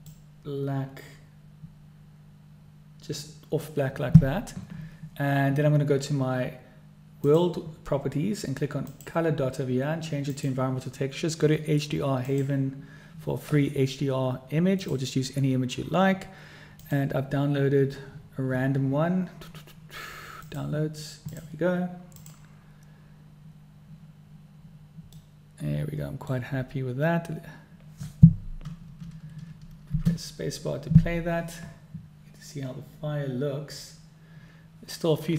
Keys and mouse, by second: 7.9 click, 9.6-11.5 drag, 12.9 click, 25.9-27.0 middle drag, 30.7 space.